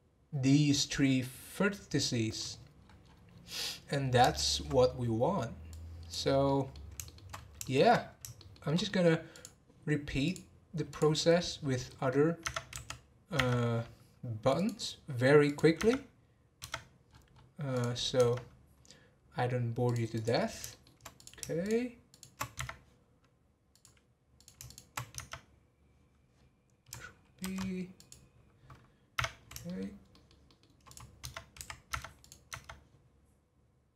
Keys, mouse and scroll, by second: 2.5-3.5 scroll down 13, 3.5-4.0 middle drag, 4.0 scroll down 1, 4.3-5.7 shift+middle drag, 5.7 click, 6.4 middle click, 7.3 scroll up 2, 7.6 shift+middle click, 8.4 shift+middle click, 9.3 click, 10.2-11.4 drag, 11.4 scroll down 2, 11.9 middle click, 12.4 Tab, 14.5 click, 15.5 click, 15.7 Tab, 17.7 click, 18.2 Tab, 20.1 click, 20.7 shift+middle click, 21.1 click, 21.6 shift+click, 22.1 shift+click, 22.5 Tab, 23.7 click, 24.3 click, 24.6 shift+click, 25.2 Tab, 29.2 Tab, 29.6-30.8 shift+middle drag, 30.8 click, 31.9 Tab, 32.2 click, 32.5 Tab.